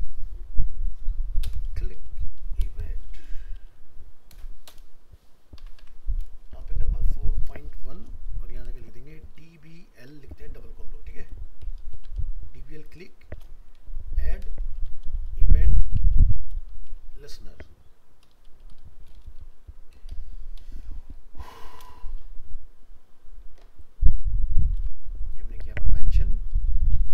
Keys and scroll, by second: 21.7 ctrl+c, 24.8 ctrl+v.